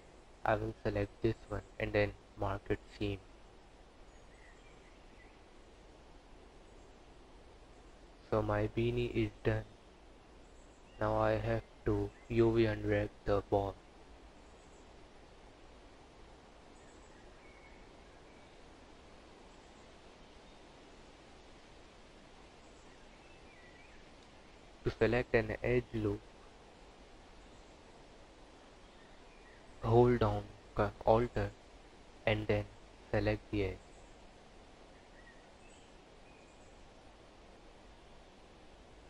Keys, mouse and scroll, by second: 1.3 u, 3.9 click, 4.9 click, 9.5 Tab, 10.9 click, 11.6 click, 12.5 click, 13.7 Tab, 14.4-14.7 scroll up 3, 15.3 2, 16.3 alt+click, 17.9 u, 22.0 alt+click, 26.3 u, 28.4 click, 29.3 Tab, 29.6 click, 30.5 click, 31.4 scroll down 6.